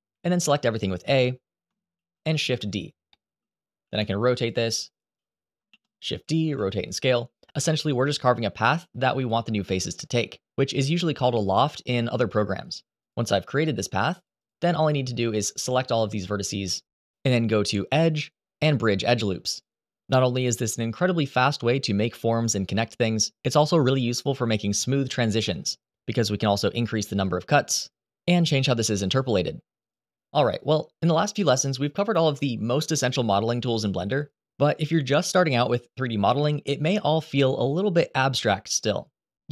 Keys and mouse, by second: 1.6 shift+d, 2.4 click, 2.8 middle click, 3.5 r, 4.2 g, 5.4 shift+d, 5.9 click, 6.1 r, 6.8 s, 8.4 g, 11.2 shift+d, 12.2 r, 12.7 click, 13.0 r, 15.1 click, 17.1-19.3 drag, 24.5-27.2 drag, 28.3 click, 30.2 click.